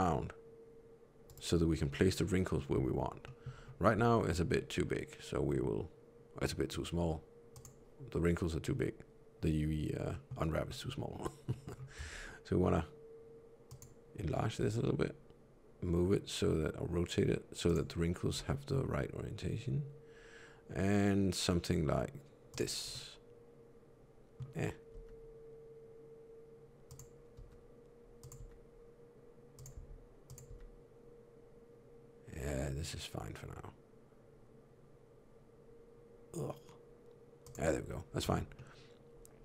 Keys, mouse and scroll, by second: 3.1 middle click, 3.4 scroll down 1, 3.9 s, 10.0 middle click, 10.5 middle click, 11.0 scroll down 1, 11.4 middle click, 11.9 s, 18.3 g, 22.8 middle click, 24.8 g, 27.2 r, 28.3 g, 29.6 s, 30.4 g, 38.1 Tab, 38.4 middle click.